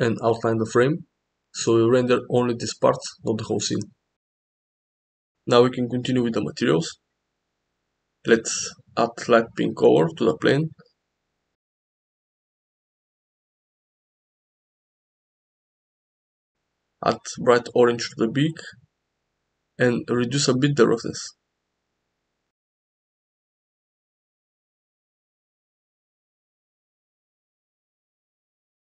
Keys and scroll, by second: 1.5 ctrl+b.